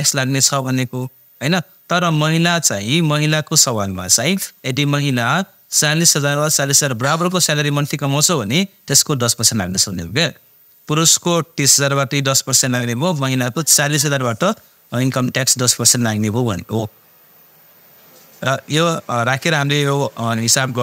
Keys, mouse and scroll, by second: 19.5 click.